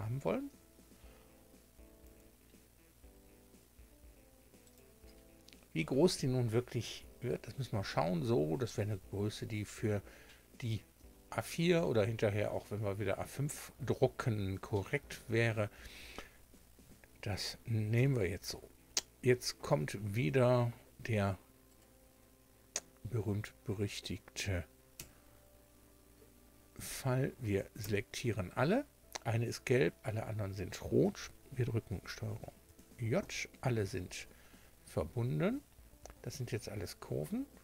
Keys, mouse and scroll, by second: 0.0 scroll down 2, 2.0 s, 4.6 click, 9.1 scroll up 1, 17.9 Tab, 19.7 Tab, 21.7 click, 23.1-23.5 scroll up 2, 24.9 1, 26.9 a, 27.8 a, 32.6 ctrl+j, 35.5 Tab, 36.6 Tab.